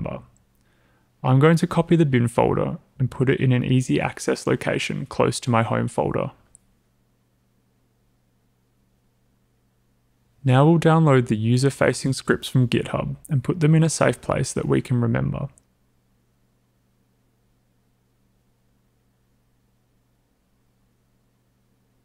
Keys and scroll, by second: 11.1-15.3 typing.